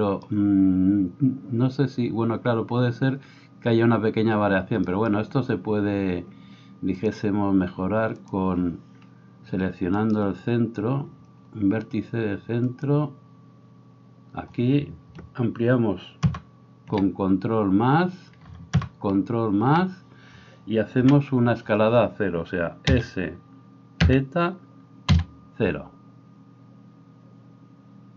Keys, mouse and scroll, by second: 17.0 ctrl+KP_Add, 19.4 ctrl+KP_Add, 21.1 KP_1, 23.0 s.